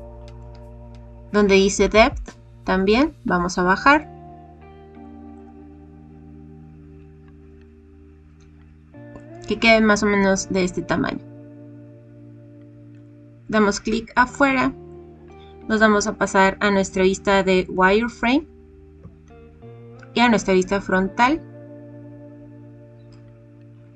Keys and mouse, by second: 1.8-4.8 drag, 5.3-9.1 drag, 12.9 click, 13.9 middle click, 14.6 click, 17.7 click, 19.0 KP_7.